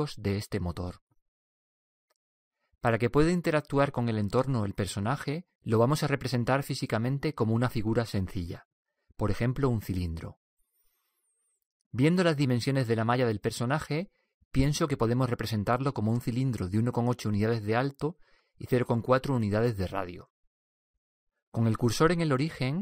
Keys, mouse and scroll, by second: 21.3 n.